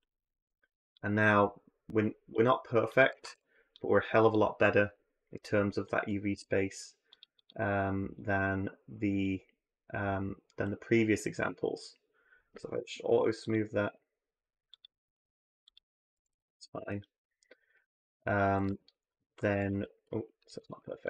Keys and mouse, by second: 0.9-1.2 drag, 2.9 a, 3.1 a, 3.6-4.1 drag, 5.7 click, 6.1 Tab, 7.2-8.3 drag, 9.0 drag, 9.1-10.4 middle drag, 12.5 w, 14.3 middle click, 14.8 middle click, 15.6-15.9 middle drag, 15.9 a, 16.1 a, 18.5 z, 19.2 a, 19.4 a, 20.4 w.